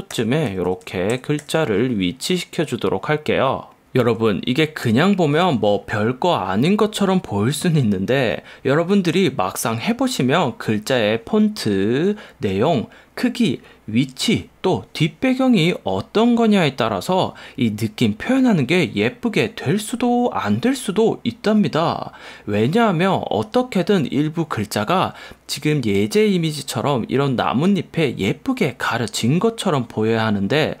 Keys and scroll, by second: 0.0 Left, 0.3 Right, 0.6 Down, 1.3 Left, 1.5 Right, 4.9 super+o.